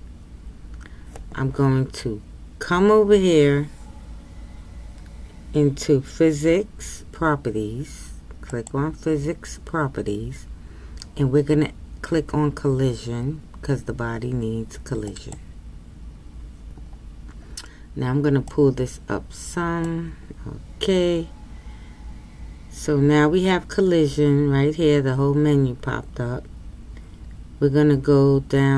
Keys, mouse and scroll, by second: 15.4-28.7 drag.